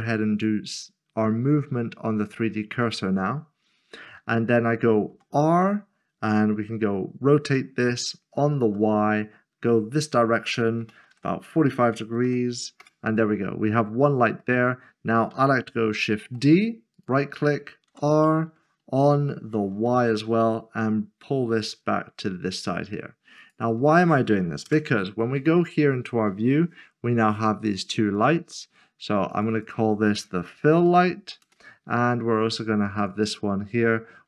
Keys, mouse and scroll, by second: 0.3 click, 2.8 click, 3.6 scroll up 1, 4.2 shift+middle click, 8.7 typing, 11.0 typing, 12.2 typing, 12.8 Return, 13.9-14.4 scroll down 1, 14.4 middle click, 16.9 d, 17.4 right click, 19.8 typing, 23.4 click, 25.9 scroll down 1, 26.3 middle click, 28.2 click, 29.5 double click, 30.5-31.2 typing, 31.4 Return, 33.0 click.